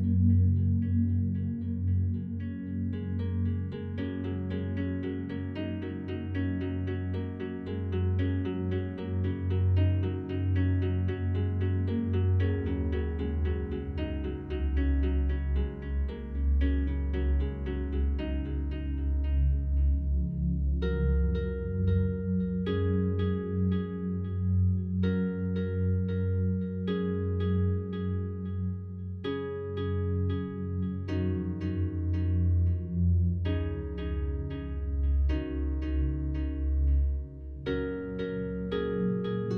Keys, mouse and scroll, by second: 1.3 right click, 2.7 shift+right click, 3.5 alt+click, 4.4 shift+right click, 6.3-10.7 alt+drag, 10.7 shift+right click, 11.9-15.5 alt+drag, 15.5 alt+click, 16.6-18.8 alt+drag, 18.8 shift+right click, 22.6-24.2 alt+drag, 24.2-24.6 scroll up 2, 25.1-26.9 alt+drag, 26.9 shift+right click, 28.8-30.5 alt+drag, 30.5-31.0 scroll down 1, 31.8 click, 33.7 a, 34.1 a, 34.3 a, 34.9 scroll down 1, 35.5-38.0 alt+drag, 38.0 shift+right click.